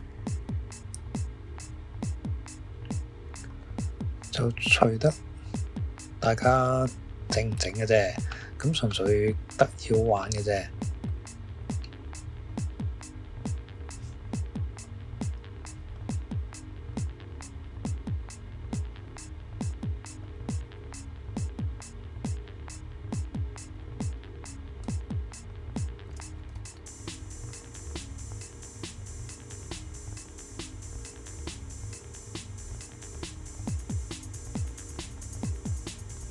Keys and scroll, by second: 8.9 typing, 26.5 Escape.